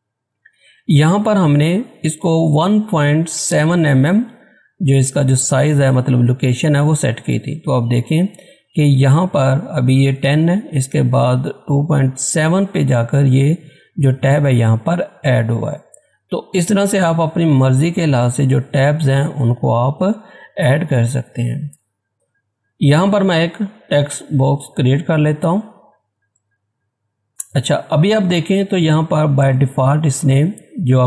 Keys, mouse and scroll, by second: 18.6 click, 20.9 click, 21.6 Tab, 23.9-27.1 drag, 27.1 scroll up 1.